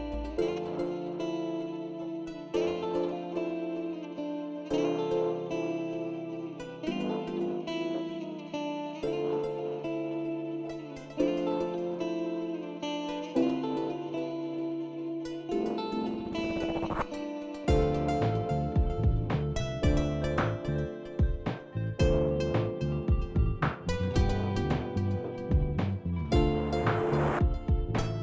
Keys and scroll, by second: 3.6 ctrl+r, 7.7 Tab.